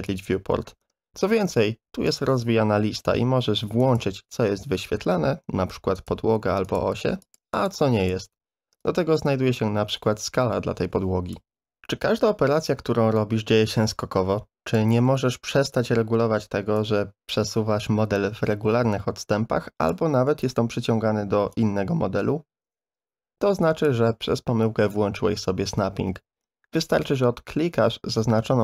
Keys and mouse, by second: 0.1 click, 2.1-11.5 drag, 12.7-14.7 drag, 15.0-15.4 middle drag, 16.8-19.9 drag, 20.4 middle click, 21.6-23.8 drag.